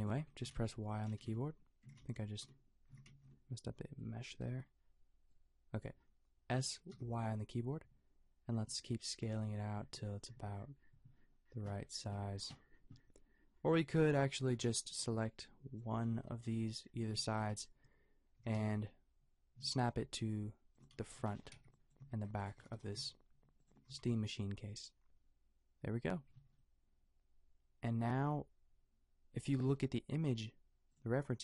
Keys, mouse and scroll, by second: 0.6 ctrl+z, 1.1 ctrl+z, 6.7 s, 14.5 a, 15.1 b, 18.3 g, 21.2 a, 21.5 b, 22.6 g, 23.9 a, 26.3 Tab.